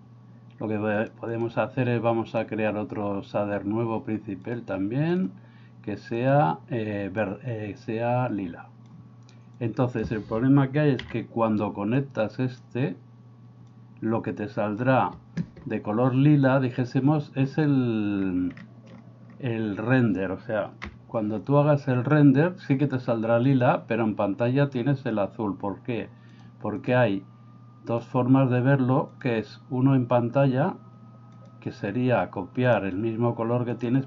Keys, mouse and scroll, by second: 1.3 drag, 2.3-5.2 drag, 6.2 click, 9.6 click, 11.1 x, 12.0 click, 13.7-14.8 drag, 23.7 F12, 26.8 drag, 28.0 drag, 31.4 click.